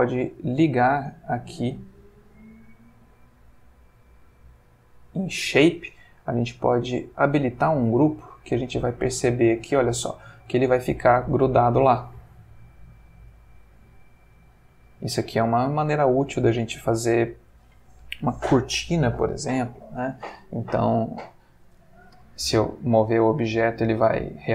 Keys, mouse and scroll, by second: 0.0 middle click, 0.8 middle click, 1.6 middle click, 2.3 middle click, 3.2 middle click, 4.6 click, 6.3 click, 7.1 click, 8.7 space, 15.1-16.0 middle drag, 16.5-17.6 middle drag, 22.1 g, 23.1 Escape.